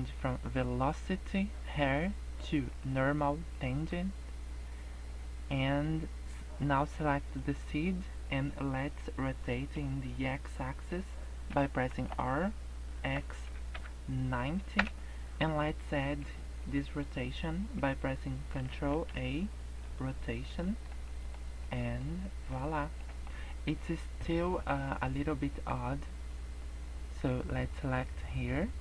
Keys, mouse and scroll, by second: 0.2 click, 3.5 middle click, 7.3 click, 11.9 r, 18.9 ctrl+a, 20.6 shift+middle click, 21.0 middle click, 21.7 middle click, 21.9 scroll up 3, 22.3 middle click, 22.7 scroll down 4, 23.0 middle click, 23.3 scroll up 2, 24.5 middle click, 25.7 scroll up 1, 27.7 click.